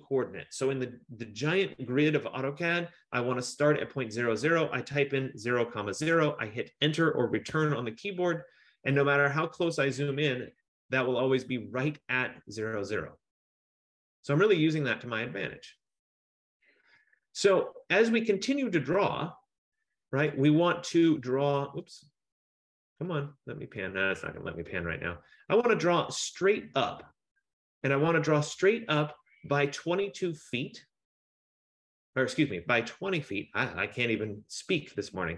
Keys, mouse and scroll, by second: 7.7 Return, 9.1 scroll, 9.2-10.4 scroll up 5, 10.4-11.0 scroll down 3, 11.0-12.2 scroll down 4, 12.2-13.7 scroll down 2, 13.7-14.5 scroll down 3, 14.5-15.0 scroll down 1, 15.0-15.4 scroll down 3, 15.9-16.2 scroll, 17.1 scroll, 19.3-20.4 scroll, 21.9 scroll, 24.5 scroll.